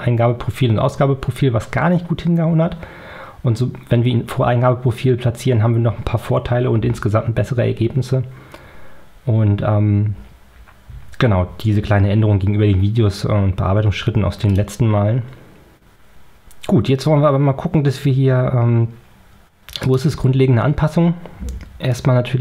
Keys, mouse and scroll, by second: 14.6 click, 19.7 click.